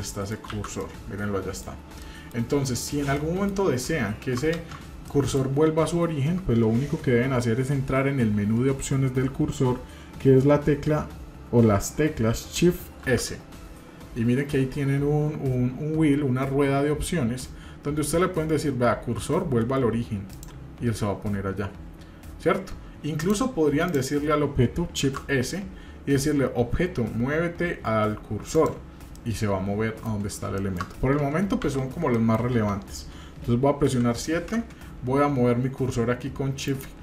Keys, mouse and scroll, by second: 0.0-0.3 middle drag, 0.5 shift+z, 0.8-1.6 middle drag, 2.0 middle click, 3.1-3.5 shift+middle drag, 4.6 ctrl+space, 36.7 shift+right click.